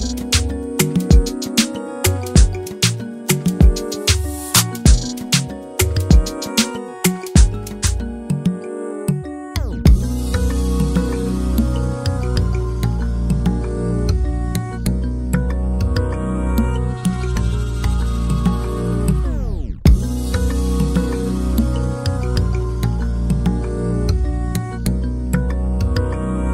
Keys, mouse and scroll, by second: 0.0-1.9 drag, 1.9 middle click, 2.3 Tab, 2.9 ctrl+Tab, 3.0 scroll up 1, 3.1 middle click, 3.5 KP_1, 5.0 click, 5.7 /, 5.9-6.6 scroll up 1, 6.6-9.3 drag, 9.3 /, 9.8 click, 10.1 middle click, 10.5 click, 10.9 middle click, 11.2 click, 11.5 middle click, 11.9 click, 12.1 middle click, 13.1 click, 13.4 shift+middle click, 13.8 click, 14.1 middle click, 14.3 click, 15.0 middle click, 15.2 scroll down 1, 15.3 shift+middle click, 15.4 scroll up 1, 15.5 middle click, 16.3 click, 16.5 middle click, 17.2 click, 17.6 middle click, 18.3 click, 18.7 middle click, 19.1 click, 19.4 middle click, 19.7 click, 19.9 middle click, 20.2 click, 20.4 middle click, 20.7 click, 20.9 middle click, 21.4 /, 21.7 middle click, 21.9 click, 22.1 middle click, 22.3 click, 22.6 middle click, 22.8 click, 23.0 middle click, 23.2 click, 23.5 middle click, 23.7 click, 24.1 middle click, 24.5 click, 24.7 middle click, 24.9 scroll down 1, 25.0 middle click, 25.2-26.0 scroll up 4, 25.3 shift+middle click, 25.5 middle click, 26.0 middle click.